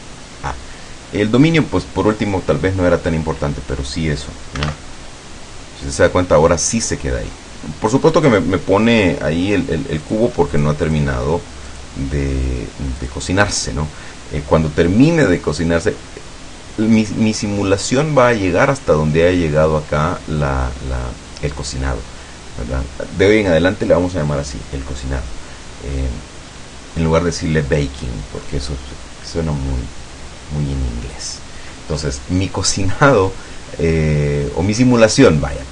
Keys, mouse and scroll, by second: 10.1 click, 10.7 click, 11.8 click, 13.1 click, 33.3-35.1 middle drag.